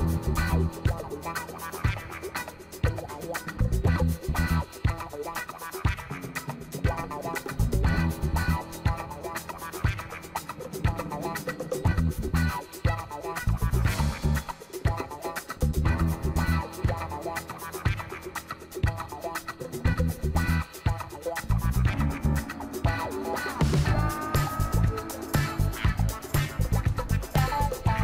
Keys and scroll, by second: 2.1 ctrl+t.